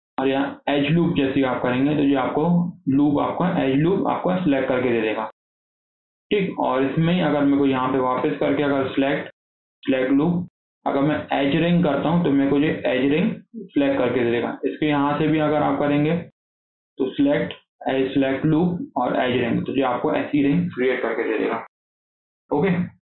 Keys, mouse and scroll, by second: 7.4 click, 8.6-11.7 drag, 15.0 click, 16.3-19.4 drag, 20.7-22.2 scroll down 4, 22.2 click, 22.5 scroll down 1, 22.7-23.0 shift+middle drag.